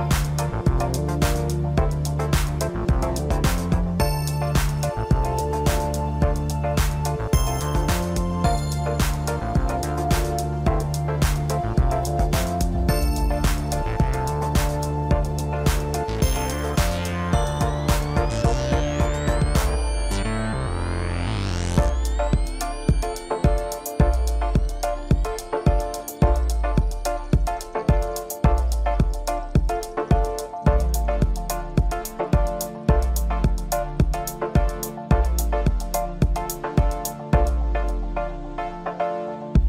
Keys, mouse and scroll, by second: 0.6 Tab, 0.9-1.3 scroll down 2, 1.3-2.7 middle drag, 2.7 KP_1, 3.3 scroll up 1, 4.5 ctrl+r, 7.2-8.1 scroll up 2, 8.1 s, 12.1 scroll up 3, 12.3-12.7 scroll down 1, 12.7-14.0 middle drag, 14.0 click, 14.5-15.5 scroll down 1, 15.5-17.3 scroll up 1, 17.3 click, 18.9 click, 19.1 click, 19.7 scroll up 2, 20.0-20.4 scroll down 3, 20.4-21.7 middle drag, 21.7 e, 24.5 scroll down 1, 24.9-26.3 middle drag, 26.3 Tab, 26.8-28.0 middle drag, 28.0 click, 28.7 click, 30.2-30.6 drag, 30.6-32.0 middle drag, 32.0-32.6 scroll up 1, 32.6 scroll down 2, 32.8-34.3 middle drag, 34.3 click, 34.7-35.0 scroll up 1, 35.0 scroll down 1, 35.2-37.3 middle drag, 37.3 click, 37.9-38.3 scroll up 2, 38.3-39.2 scroll down 2, 39.2 click.